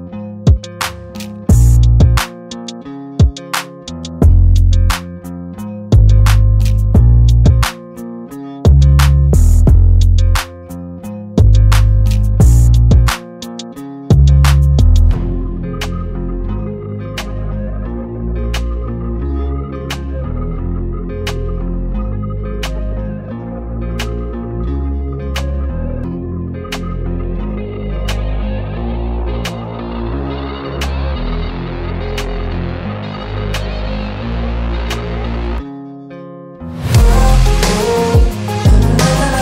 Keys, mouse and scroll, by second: 5.3 right click, 7.3 [, 8.2 double click, 8.3 [, 9.3 double click, 22.9 double click, 26.3 double click.